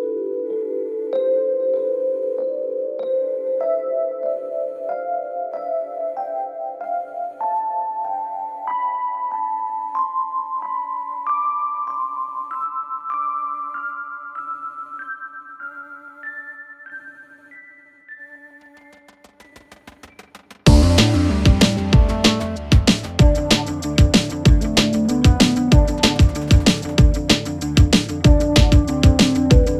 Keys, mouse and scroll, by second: 5.2-6.3 click, 8.8 shift+Num_Lock, 9.0 shift+click, 10.1-11.8 typing, 12.6-14.3 click, 23.0-23.9 click, 28.2 click, 29.3 click.